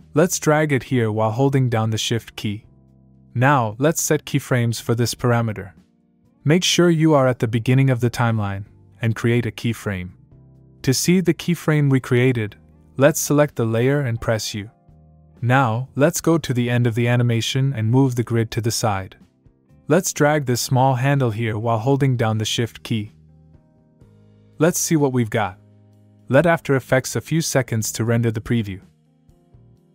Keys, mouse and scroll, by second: 3.8 click, 7.1 click, 9.5 click, 13.4 click, 14.6 u, 16.4 click, 19.5 click, 21.4 click, 26.4 click, 27.3 space.